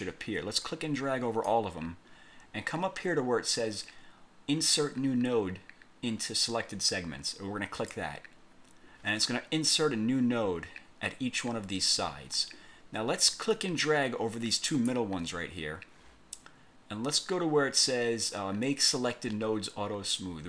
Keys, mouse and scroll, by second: 0.7 click, 7.9 click, 13.7-15.2 drag.